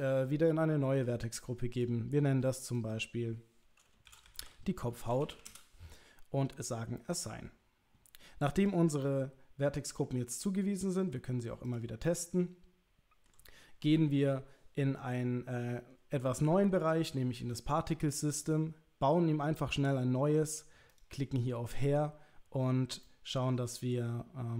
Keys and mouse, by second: 1.8 click, 2.6 click, 2.8-6.2 drag, 7.2 click, 9.0 middle click, 10.9 click, 12.1-13.3 middle drag, 16.8 click, 18.5 click, 20.9 click, 23.0 middle click.